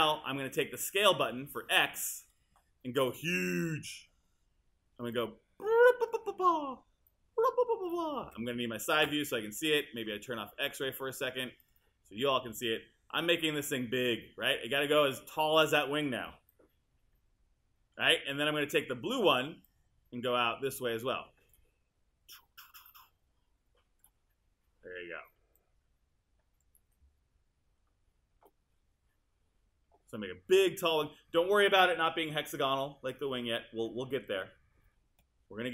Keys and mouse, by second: 8.2 space, 11.7 click, 13.7 click.